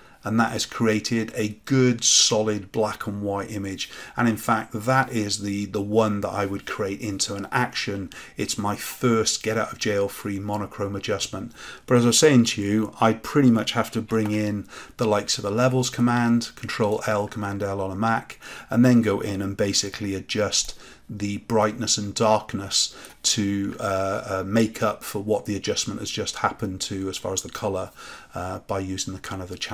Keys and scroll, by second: 14.0 ctrl+l.